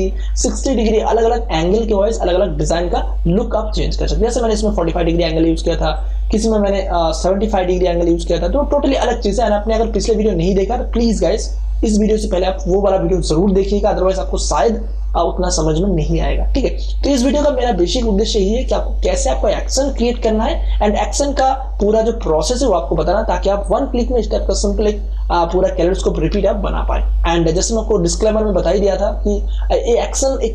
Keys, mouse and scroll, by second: 2.9 click, 5.9 click, 9.3 click.